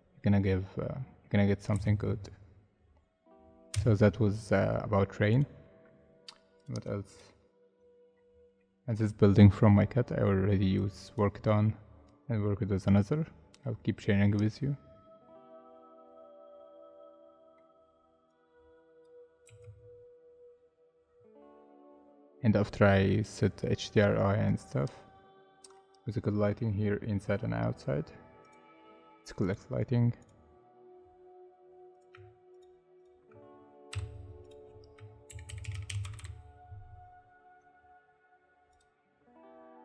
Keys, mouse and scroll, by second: 1.7 space, 3.7 space, 7.7 scroll down 1, 8.1 scroll up 1, 9.0 scroll down 1, 9.6 scroll up 1, 14.9 scroll down 1, 15.5 middle click, 19.4 z, 25.7 middle click, 31.0-31.6 scroll down 1, 32.1 scroll down 1, 32.5 shift+click, 33.9 m, 35.0-36.4 typing, 37.5-38.0 scroll down 1, 38.0-38.8 scroll up 1.